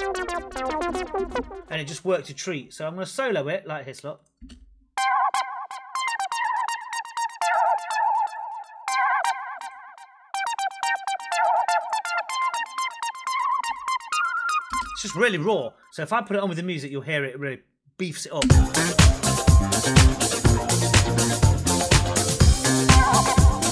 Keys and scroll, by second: 4.3 space, 14.6 space, 18.3 space.